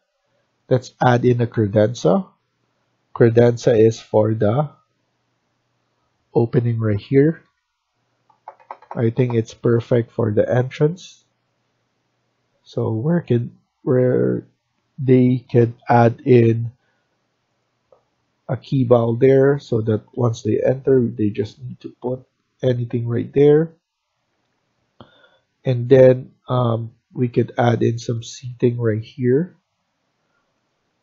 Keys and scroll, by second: 6.9-7.3 typing, 12.9 Escape, 13.9 Escape, 14.2 Escape, 15.5-16.2 typing, 20.0 Escape, 24.2 Escape.